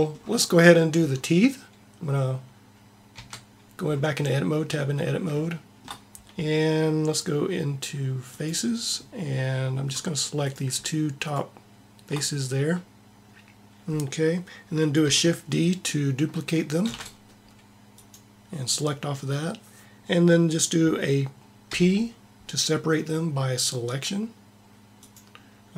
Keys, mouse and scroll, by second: 3.1 Tab, 8.3-11.1 drag, 12.7 click, 16.9 shift+d, 21.6 p.